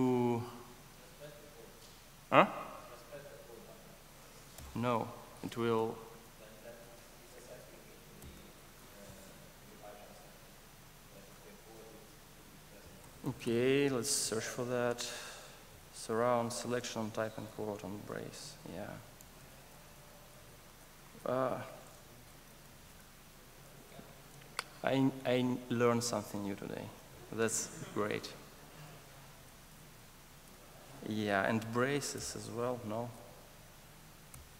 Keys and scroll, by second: 6.1 super+z, 6.6 super+z, 7.4 super+z, 20.6 super+z, 33.2 super+z.